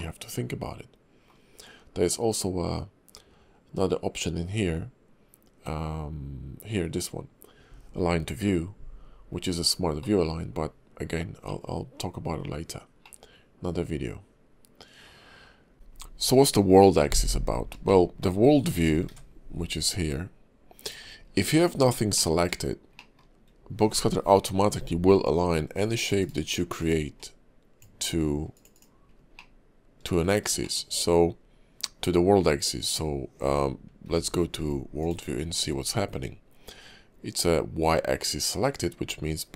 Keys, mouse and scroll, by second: 1.5-2.4 scroll down 2, 10.0 middle click, 10.4-10.8 scroll up 2, 11.4 middle click, 12.6-13.0 scroll down 1, 13.0 middle click, 15.7 shift+middle click, 15.7-16.1 scroll down 1, 17.5 scroll down 1, 17.9 shift+middle click, 19.0 shift+v, 20.8 right click, 21.2 scroll down 2, 21.5 click, 21.8-22.2 scroll down 2, 22.2 middle click, 22.9 shift+middle click, 24.5 scroll up 1, 24.6 scroll down 2, 25.2 click, 26.8 click, 27.2 click, 28.7 click, 29.0 scroll down 3, 29.3 middle click, 30.6 shift+middle click, 30.9-32.1 shift+scroll up 1, 34.0 shift+v.